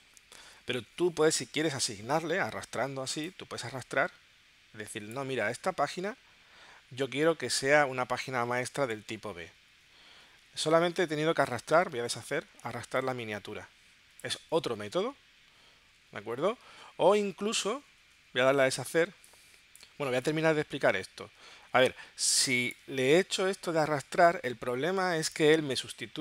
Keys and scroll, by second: 19.0 space, 22.2 space.